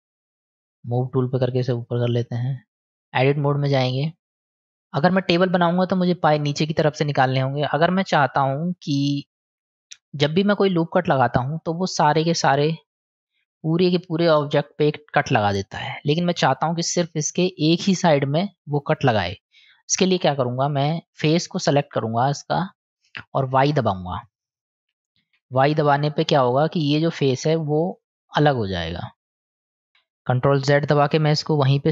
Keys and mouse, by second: 1.9 click, 2.9 Tab, 3.5 click, 5.5 click, 7.6-9.9 middle drag, 11.4 click, 12.5 middle click, 15.8 middle click, 20.2 click, 22.7 middle click, 23.1 click, 26.5 middle click, 27.9 click, 29.3 click, 31.0 ctrl+z, 31.7-31.9 middle drag.